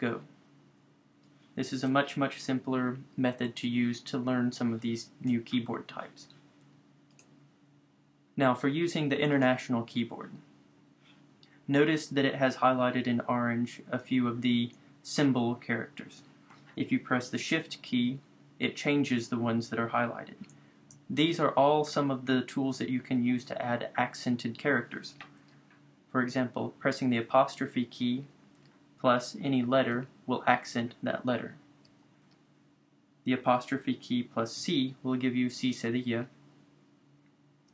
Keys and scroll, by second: 3.3 BackSpace, 31.9 Return, 34.7 c, 37.6 Return.